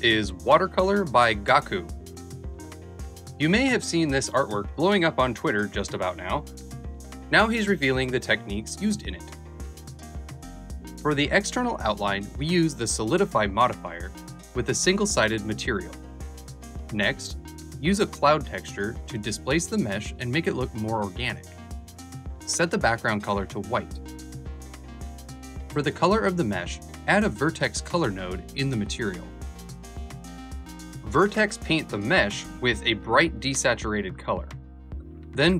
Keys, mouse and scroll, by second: 10.9-14.7 shift+drag, 15.1-21.8 drag, 23.5 click, 24.1-25.6 alt+drag, 31.4 alt+Right, 31.8 alt+Left, 32.2 right click, 35.1 click.